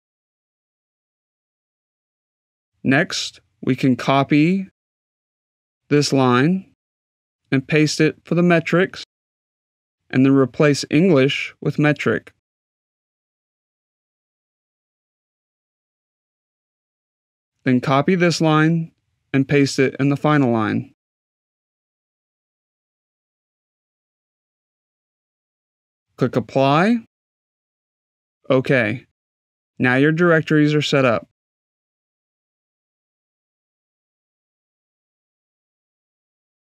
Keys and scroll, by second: 12.4 BackSpace, 14.7-16.3 typing.